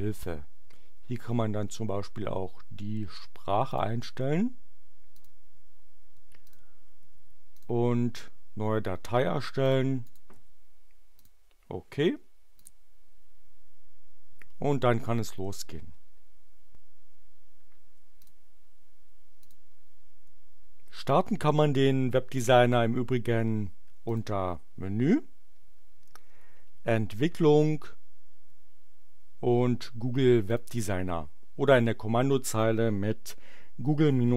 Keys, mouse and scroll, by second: 3.7 click, 5.0 click, 6.4 click, 7.6 click, 9.6 click, 10.0 click, 10.4 x, 11.2 click, 12.5 click, 18.1 click, 19.3 click, 24.0-25.3 drag, 30.4 click.